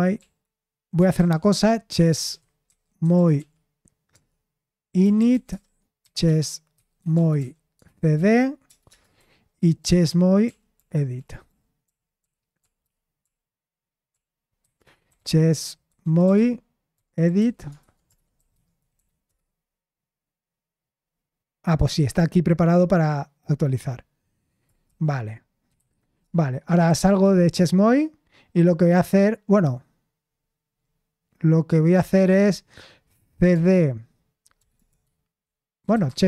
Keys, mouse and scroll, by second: 0.0-0.1 typing, 0.1 Right, 1.1 ctrl+c, 1.6-9.8 typing, 10.0 ctrl+p, 14.6 ctrl+p, 14.6-19.7 typing, 25.4-27.6 typing, 33.1-36.2 typing.